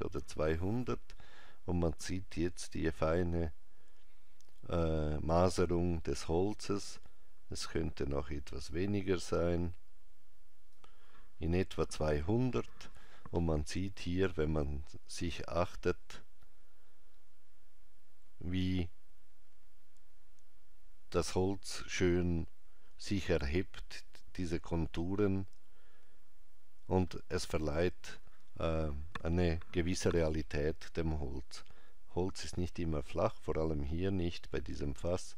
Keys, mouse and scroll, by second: 7.5 click.